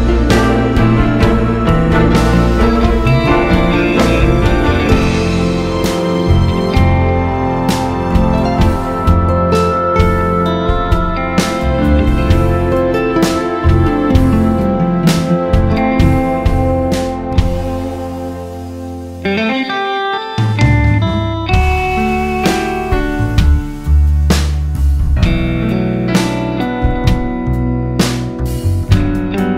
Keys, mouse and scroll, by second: 0.1 click, 1.7-3.1 scroll up 2, 3.1 scroll up 1, 3.3 click, 3.9 click, 6.8-9.8 drag, 13.5 click, 14.1 scroll down 1, 15.7-23.9 drag, 20.5 scroll up 1, 21.2 `, 22.0 KP_0, 22.3 scroll down 1, 22.9 scroll up 1, 24.1 click, 25.9-29.5 drag.